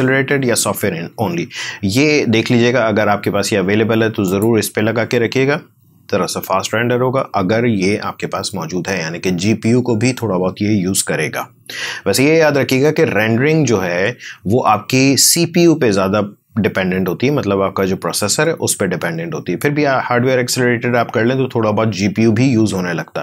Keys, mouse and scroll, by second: 4.2 click, 15.1-22.1 drag.